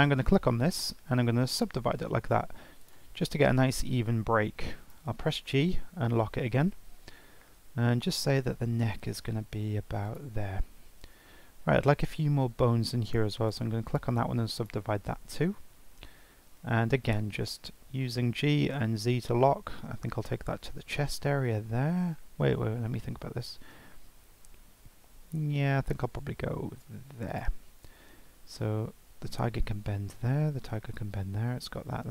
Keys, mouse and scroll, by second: 0.7-2.8 right drag, 2.8 click, 4.9 g, 13.0 click, 13.5-14.5 right drag, 14.5 click, 16.8 g.